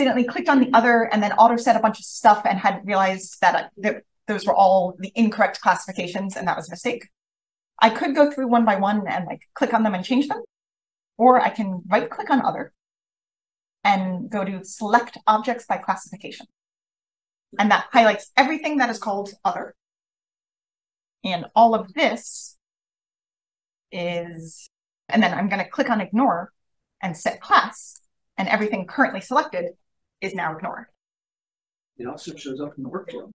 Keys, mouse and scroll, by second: 11.8-13.3 right drag, 22.8 click, 27.7 click, 31.6 click, 31.7 click, 32.3-33.3 scroll down 6, 33.2 click.